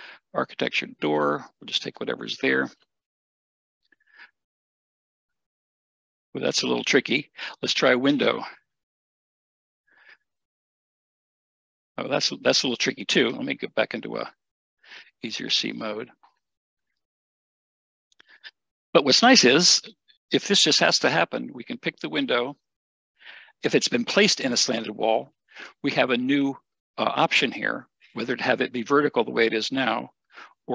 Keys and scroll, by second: 5.8 Escape, 9.3 n, 11.9 Escape, 15.6 typing, 18.1 Escape.